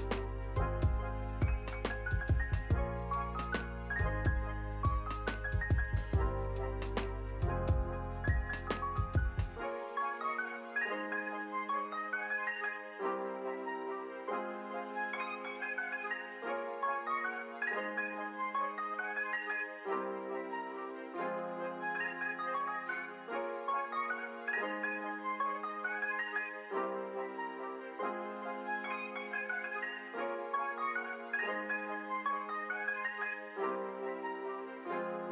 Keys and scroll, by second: 10.7 ctrl+z, 28.6 y, 30.9 ctrl+s, 32.9 p.